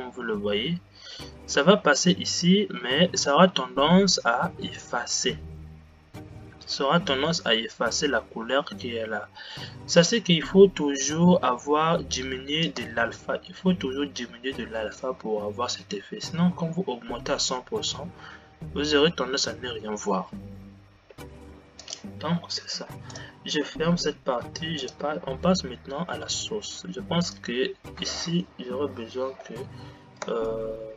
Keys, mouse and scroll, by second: 13.2 space, 22.1-27.6 drag, 29.0 Delete, 30.3 space.